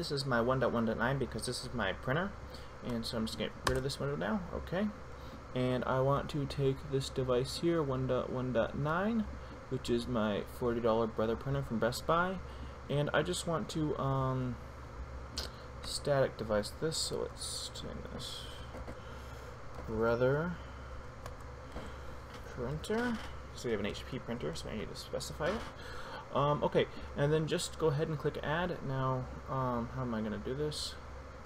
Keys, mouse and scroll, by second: 10.6 click, 17.0 click, 17.3 ctrl+a, 17.9-25.3 typing.